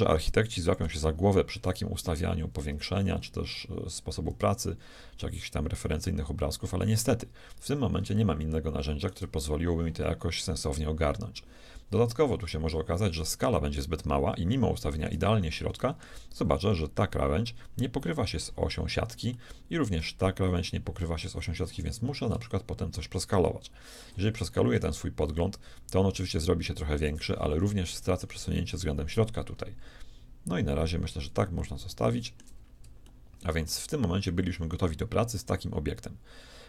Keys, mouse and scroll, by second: 1.0-3.0 scroll down 1, 3.0-5.5 scroll up 1, 7.3 scroll down 1, 7.5-10.8 middle drag, 13.5 middle click, 14.3-17.6 shift+middle drag, 19.4-21.2 shift+middle drag, 25.3-27.4 shift+drag, 27.9-34.3 shift+middle drag, 34.5-36.1 middle drag.